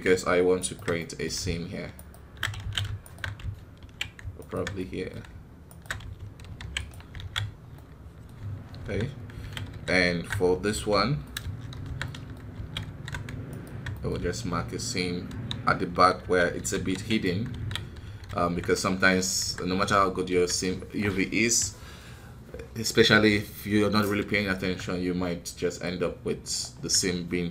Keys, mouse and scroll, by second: 1.9 alt+shift+right click, 2.5 ctrl+z, 3.0-4.8 alt+shift+right drag, 4.8-7.3 middle drag, 7.3 scroll down 2, 7.7-8.7 middle drag, 8.7 alt+h, 9.1 scroll up 1, 9.3 alt+a, 9.6 alt+KP_2, 10.7 l, 11.2 middle click, 11.7 shift+h, 12.0 middle click, 12.5 alt+a, 12.8 alt+KP_2, 13.4-15.2 alt+right drag, 15.2 ctrl+w, 18.7 middle click, 19.3 KP_1, 20.0 scroll down 2, 20.2 a, 20.5-25.8 middle drag, 25.8-27.5 drag.